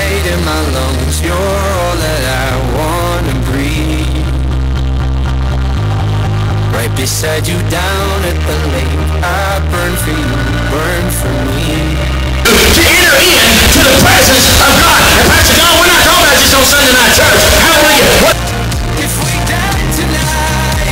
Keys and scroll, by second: 18.4 Page_Down.